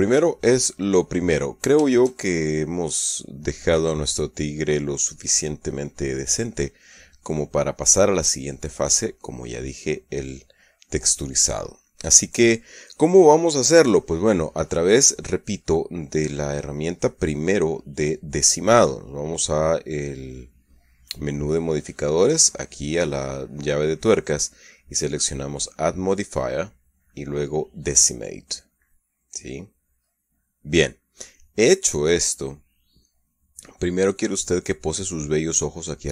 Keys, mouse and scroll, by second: 1.2-6.6 middle drag, 6.8-9.4 middle drag, 10.0 click, 22.0 click, 26.7 click, 29.8 click.